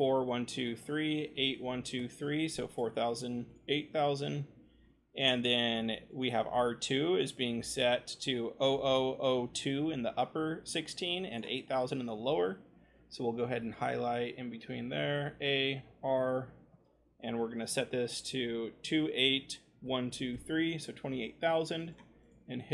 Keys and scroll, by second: 0.0 0, 1.2 8, 1.5 0, 15.7 r, 18.4-19.8 typing.